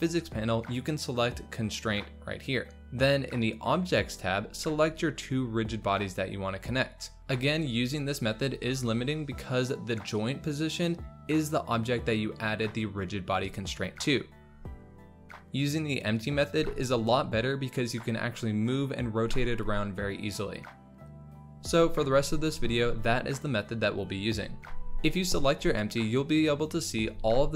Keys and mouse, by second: 1.5 click, 4.7-5.9 drag, 6.8-8.3 drag, 11.6 g, 15.6 click, 16.4 click, 16.5 space, 26.0 click.